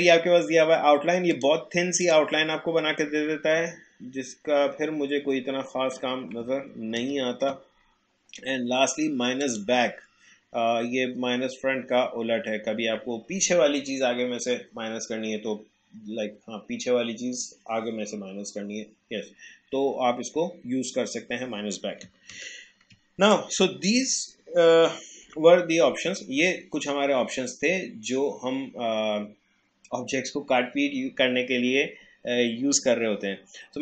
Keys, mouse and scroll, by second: 1.3 click, 3.7 alt+scroll up 1, 4.7 alt+scroll down 1, 5.5-6.0 alt+scroll up 1, 7.0 ctrl+z, 9.4 click, 22.3 ctrl+z, 23.3-25.2 drag, 25.2 Delete, 32.8 alt+Delete, 33.1-33.8 alt+scroll down 1.